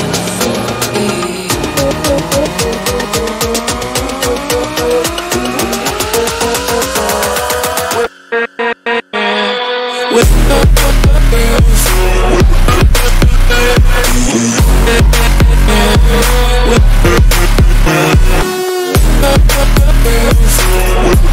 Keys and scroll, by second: 0.1 ], 18.2 Caps_Lock, 19.1 [.